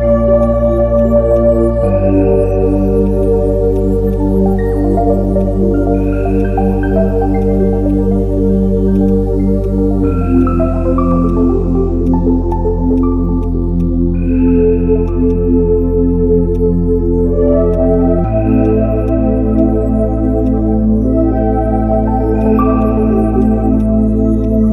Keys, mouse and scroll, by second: 3.1 right click, 8.9 right click.